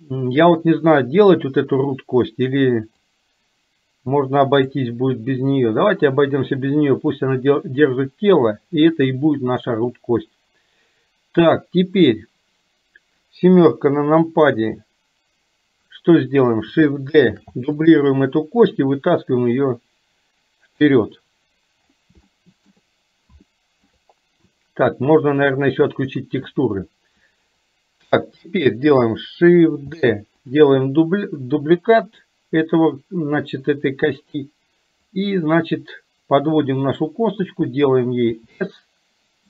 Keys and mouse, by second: 1.4 click, 3.2-4.8 drag, 6.3-7.3 drag, 13.8 KP_7, 17.4 shift+d, 19.4-20.9 drag, 22.3 shift+middle click, 23.4 shift+middle click, 29.9 shift+d, 31.4-34.4 drag, 35.0-37.2 drag.